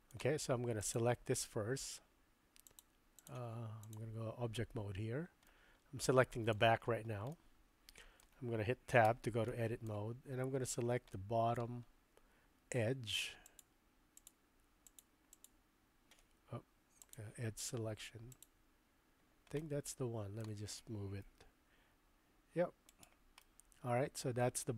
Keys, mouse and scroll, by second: 2.8 click, 3.9 click, 5.5-6.6 middle drag, 7.4-8.3 shift+middle drag, 9.1 Tab, 9.5 middle click, 11.1 middle click, 13.5 click, 14.2 click, 14.8 click, 15.4 click, 17.1 click, 18.3 click, 19.6 middle click, 21.2 g, 23.4-24.7 middle drag.